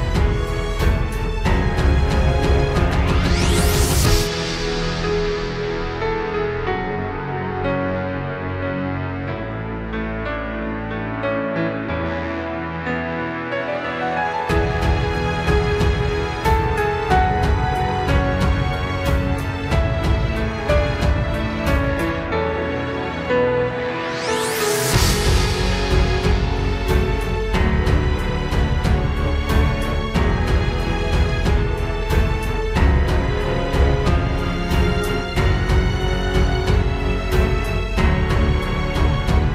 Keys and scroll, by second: 1.7 ctrl+g, 2.5 ctrl+g, 3.5 ctrl+s, 4.4 ctrl+s, 4.7 ctrl+t, 7.5 ctrl+space, 8.2 ctrl+space, 9.8 ctrl+t, 10.4 ctrl+x, 11.2 ctrl+t, 14.9 ctrl+t, 14.9 ctrl+space, 15.3 ctrl+z, 17.4 ctrl+t, 20.4 ctrl+z, 21.1 ctrl+z, 23.7 ctrl+space, 24.5 ctrl+space, 27.3 ctrl+space, 28.8 ctrl+space, 31.5 ctrl+space, 31.7 ctrl+z, 33.7 ctrl+space, 34.4 ctrl+space, 35.2 ctrl+space, 36.9 ctrl+h, 37.0 ctrl+space.